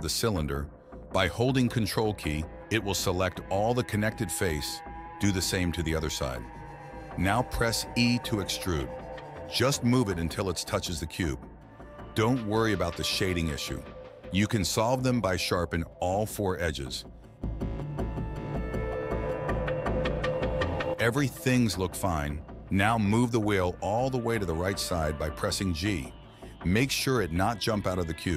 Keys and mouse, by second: 1.8 ctrl+shift+click, 3.0 shift+click, 3.6 ctrl+click, 5.2 e, 8.3 i, 10.5 ctrl+z, 11.2 e, 14.8 alt+click, 15.9 click, 16.3 alt+click, 16.6 alt+click, 16.9 alt+shift+click, 17.2 alt+shift+right click, 18.8 middle click, 19.4 alt+shift+click, 19.9 alt+shift+click, 20.1 alt+shift+right click, 20.3 right click, 21.1 Tab, 21.9 click, 23.8 KP_1, 24.1 KP_3, 25.2 click, 25.4 g, 26.8 g.